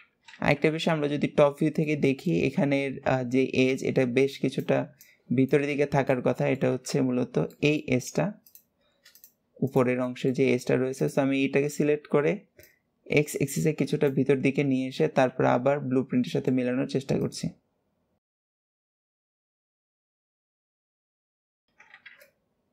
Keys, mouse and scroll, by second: 0.5 scroll down 1, 1.7-5.5 shift+middle drag, 6.0 middle click, 6.7 scroll up 2, 7.3 middle click, 8.2 click, 8.8 click, 9.4 shift+click, 9.8 shift+middle click, 10.7 shift+click, 12.4 click, 15.7-16.0 scroll down 2, 16.0 shift+middle click, 17.0 click, 18.8 click, 19.6 shift+middle click, 19.8 click, 20.0 click, 20.5 click, 21.3 shift+middle click, 22.0-22.7 middle drag.